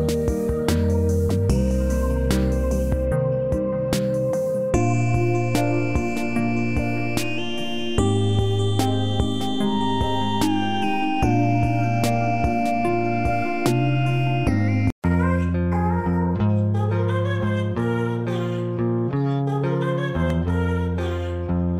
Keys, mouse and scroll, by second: 11.4 scroll up 1, 11.9-13.1 alt+middle click, 13.1-13.7 scroll down 1, 14.3-14.8 alt+middle drag.